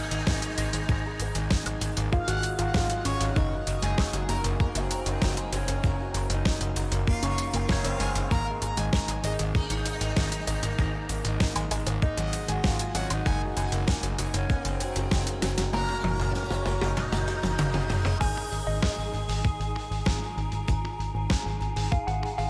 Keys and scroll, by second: 2.6-3.7 typing, 16.5 s, 16.9 s, 17.6 s, 19.6 s, 20.3 shift+s.